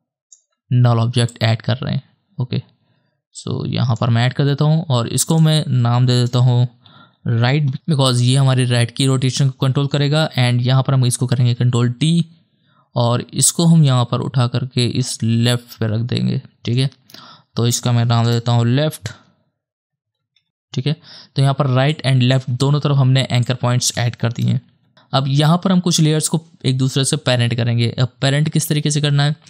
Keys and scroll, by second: 6.3 Return, 6.6-8.6 typing, 11.5 ctrl+d, 18.3 Return, 19.6-21.7 typing, 24.7 /.